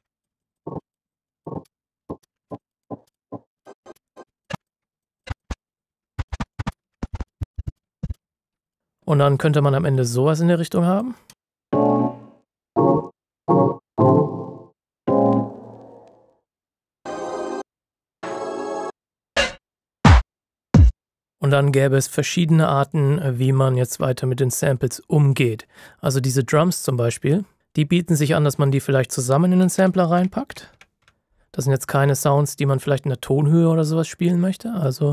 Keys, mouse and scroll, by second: 0.0 scroll up 1, 0.1 click, 0.2 ctrl+shift+scroll down 2, 0.4 click, 0.6 space, 0.8 click, 1.4 space, 1.4 ctrl+shift+scroll down 1, 1.5 ctrl+shift+scroll up 2, 1.7 ctrl+click, 2.1 ctrl+space, 2.2 ctrl+shift+scroll down 1, 2.3 scroll up 3, 2.4 click, 2.6 click, 2.9-5.5 typing, 2.9-3.4 ctrl+shift+scroll down 3, 3.1 click, 3.5 ctrl+shift+scroll up 3, 3.6 click, 3.7 ctrl+shift+scroll down 2, 4.0 scroll up 1, 4.2 ctrl+shift+scroll down 2, 4.4 click, 4.6 click, 4.9 scroll down 1, 5.0 click, 5.4 click, 5.4 scroll up 1, 5.5 click, 5.9 ctrl+shift+scroll down 1, 6.0 scroll up 1, 6.1 click, 6.2 ctrl+shift+scroll down 2, 6.5 click, 6.6-8.0 typing, 6.8 ctrl+shift+scroll up 4, 7.0 click, 7.3 click, 7.5 click, 7.7 click, 7.8 ctrl+shift+scroll up 2, 7.9 click, 8.5 scroll down 1, 8.6 click, 10.1-10.4 scroll down 1, 11.3 space, 23.3 Return, 23.4-25.9 ctrl+shift+scroll up 2, 26.8-27.6 scroll up 1, 27.6 space, 28.6 click, 29.6-31.2 typing, 33.2 typing, 34.8 click.